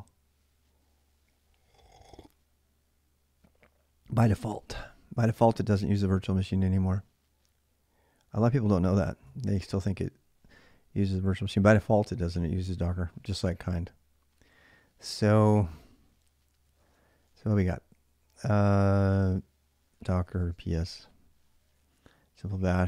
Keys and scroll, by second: 15.6 ctrl+a, 15.7 ctrl+a, 16.6 ctrl+a, 19.4-20.9 typing.